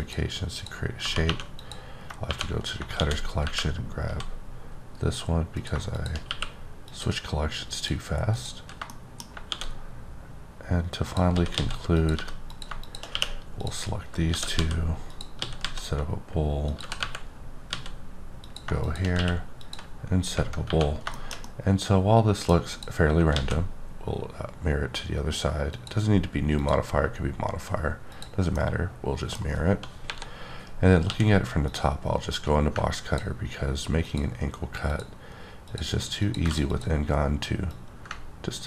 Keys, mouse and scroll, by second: 0.0 click, 0.6 click, 1.0 typing, 1.6 click, 2.9 shift+d, 3.4 y, 4.1 z, 5.6 click, 6.2 q, 6.8 click, 7.7 click, 8.3 click, 8.9 shift+middle click, 9.5 shift+d, 11.0 click, 11.3 s, 11.5 x, 11.9 click, 12.1 g, 12.5 click, 13.1 q, 13.6 click, 14.3 shift+d, 14.5 z, 15.1 click, 15.4 s, 15.6 z, 16.7 click, 16.7 g, 17.0 y, 17.7 z, 18.4 click, 19.1 q, 19.6 click, 20.2 scroll down 2, 20.6 1, 21.1 shift+middle click, 21.4 middle click, 23.1 click, 23.3 x, 25.7 click, 26.6 click, 28.1 click, 28.5 middle click, 30.0 KP_7, 30.7 scroll up 2, 31.0 d, 31.6 click, 32.3 click, 34.9 ctrl+double click, 35.6 ctrl+click, 36.2 ctrl+click, 36.5 ctrl+double click, 36.7 click, 37.7 click, 37.7-38.5 typing.